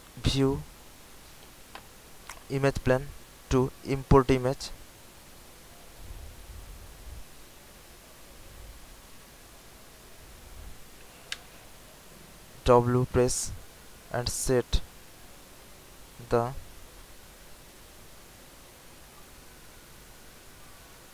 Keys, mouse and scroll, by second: 7.9 alt+middle click, 8.6 scroll up 1, 9.3 alt+scroll up 1, 9.9-10.3 alt+scroll up 1, 10.7 scroll up 1, 13.7-19.2 drag.